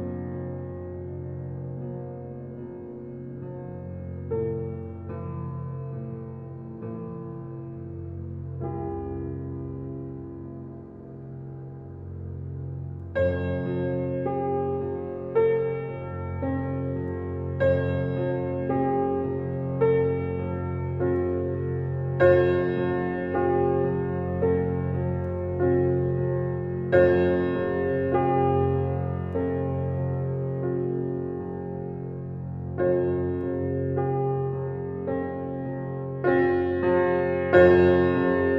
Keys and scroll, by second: 3.9 Right, 9.8 Right, 14.5 Right, 16.6 Right, 21.8 Right, 26.2 Right, 31.9 Right, 34.0 Right.